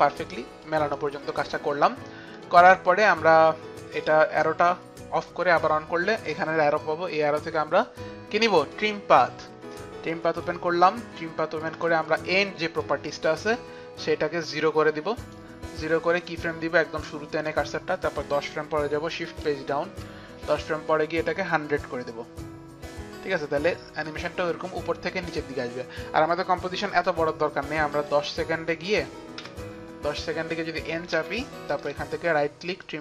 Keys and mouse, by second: 0.7 click, 2.4 click, 4.0 click, 6.3 click, 7.4 click, 8.3 click, 8.8 click, 10.4 click, 12.9 click, 14.1 click, 19.3 shift+Page_Down, 23.6 click, 24.1 click, 28.0 click, 30.8 Page_Down, 30.8 click, 31.2 n, 31.8 right click, 32.8 click.